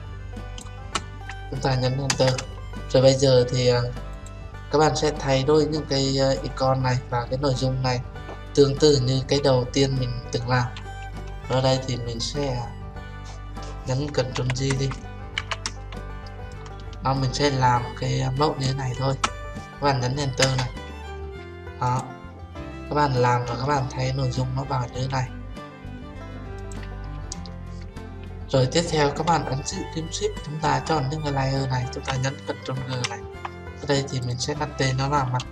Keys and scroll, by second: 2.1 Return, 14.4 ctrl+j, 15.5 ctrl+t, 20.5 Return, 32.8 ctrl+g.